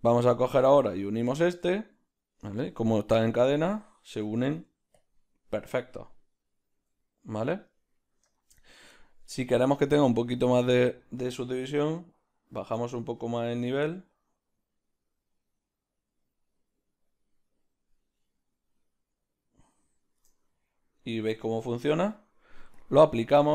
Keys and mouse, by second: 1.7-11.4 middle drag, 5.0 z, 7.5 z, 11.4-20.6 shift+drag, 20.6-22.9 middle drag, 22.9 click.